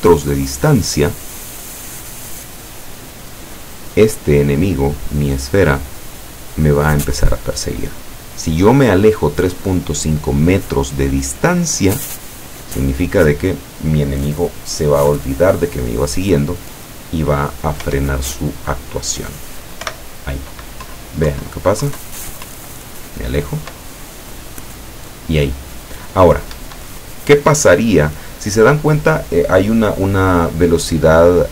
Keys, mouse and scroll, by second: 17.9 p, 19.9 p, 21.0 Down, 22.5 Up, 26.6 Escape.